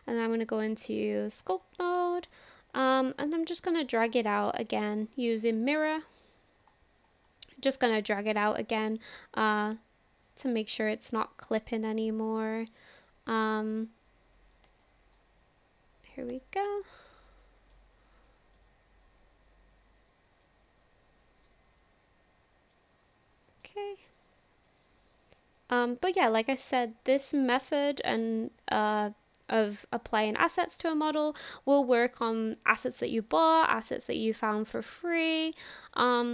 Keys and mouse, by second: 0.2-1.3 drag, 2.1 shift+middle click, 2.5 middle click, 3.5 shift+middle click, 3.9 middle click, 4.6 shift+middle click, 6.2 click, 7.5 middle click, 8.3-10.3 drag, 10.6 middle click, 12.3 click, 13.3 middle click, 14.8 shift+middle click, 15.4 click, 16.4 shift+middle click, 17.4 middle click, 17.5 click, 17.6 middle click, 18.3 middle click, 19.2-20.4 drag, 20.9 click, 22.0 click, 23.0 middle click, 24.7 click, 25.9 middle click, 26.5 shift+middle click, 27.9-30.6 drag, 30.9 middle click, 31.9 shift+middle click, 32.3 middle click, 33.3 shift+middle click, 34.0 middle click, 34.8 shift+middle click, 35.5 middle click, 36.2 shift+middle click.